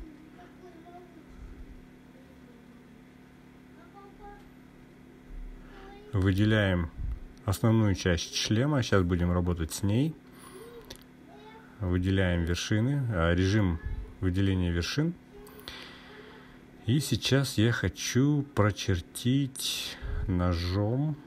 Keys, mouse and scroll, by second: 5.7-6.5 drag, 7.2 click, 8.5-9.4 drag, 11.2 click, 12.9 click, 17.1-18.3 drag.